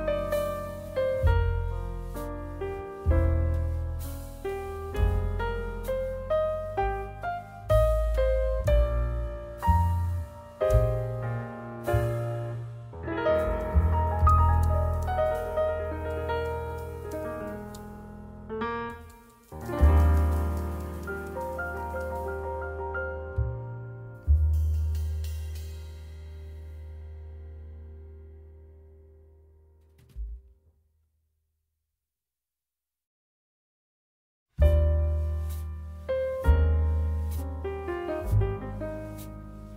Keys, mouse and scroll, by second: 9.5 click, 11.2 s, 12.1 y, 38.5 click, 38.5 middle click.